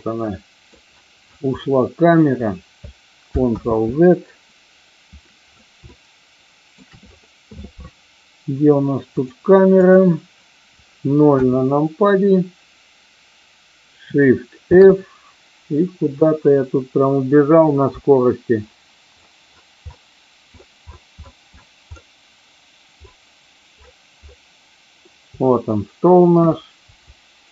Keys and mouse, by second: 3.4 ctrl+z, 3.6 ctrl+click, 5.8-6.8 shift+middle drag, 9.7 click, 11.2 KP_0, 14.6 shift+f, 17.8-25.1 Down, 26.4 Up, 26.9-27.5 Up.